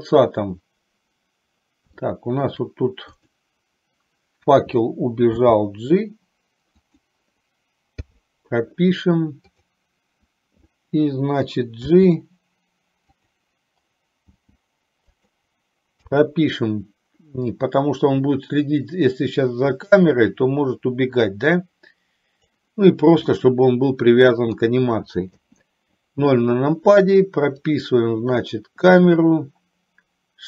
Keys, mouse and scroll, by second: 2.1 shift+middle click, 5.5 g, 8.1 i, 9.7 click, 12.0 g, 14.4 g, 16.1 i, 17.7-22.9 drag, 23.4-24.7 middle drag, 25.5 KP_0, 28.0 click.